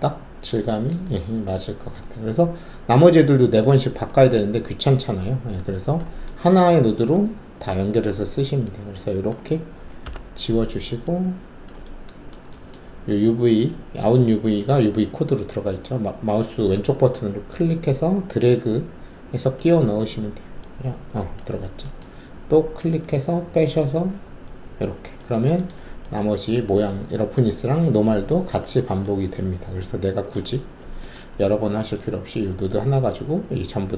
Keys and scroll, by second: 10.0 Delete.